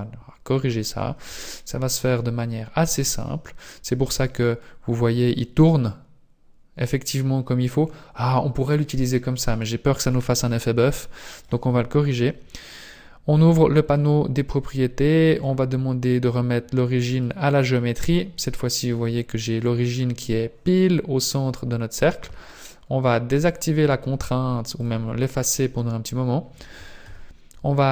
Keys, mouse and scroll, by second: 2.3 click, 2.5 click, 3.3-3.9 scroll down 2, 4.7 click, 10.1 click, 13.5 t, 15.3 click, 17.2 click, 18.3 scroll up 2, 19.1 middle click, 23.4 click, 24.8 click, 25.5-27.0 scroll down 2, 27.0 KP_1.